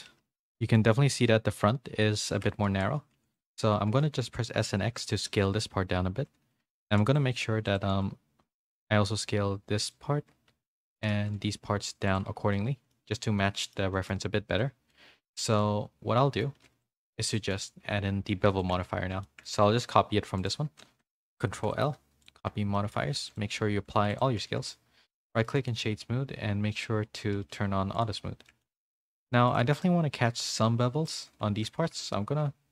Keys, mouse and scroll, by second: 0.0 z, 0.7 shift+middle click, 2.3 Tab, 2.7 z, 3.1 3, 3.3 click, 3.9 s, 5.3 z, 6.7 s, 7.3 2, 8.4 s, 12.2 z, 12.5 middle click, 13.4 middle click, 13.9 shift+middle click, 14.4-16.2 middle drag, 16.2 scroll up 1, 16.3 middle click, 16.4-17.1 scroll down 1, 17.1 Tab, 17.1 2, 17.3 middle click, 18.6 shift+middle click, 19.2 shift+middle click, 20.4 shift+click, 21.5 ctrl+l, 22.7 middle click, 23.3 click, 23.6 ctrl+a, 24.4 a, 24.7-26.7 middle drag, 24.7 a, 27.9 click, 28.5 shift+middle click, 29.0 middle click, 29.0 a, 29.6 Tab, 29.8-31.0 middle drag, 31.2 2, 31.8 s.